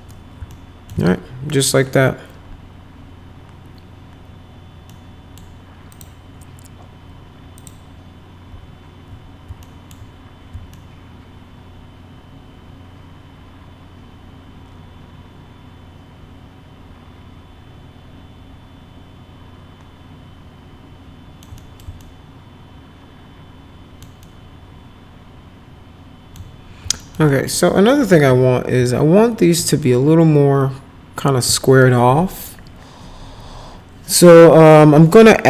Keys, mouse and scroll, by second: 0.5 alt+middle click, 0.9 z, 1.5 middle click, 4.9 middle click, 5.9 click, 7.6 click, 9.7 alt+middle click, 10.7-21.4 alt+middle drag, 21.6 middle click, 22.0-24.1 alt+middle drag, 24.2-26.3 alt+middle drag, 27.0 alt+middle click, 27.3 middle click, 28.0 F4, 28.3 F3, 28.8 F3.